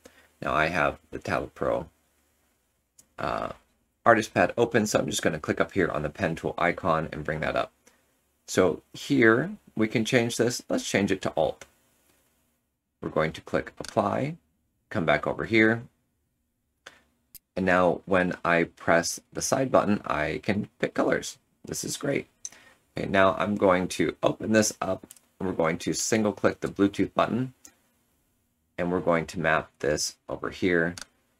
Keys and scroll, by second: 23.7 Tab.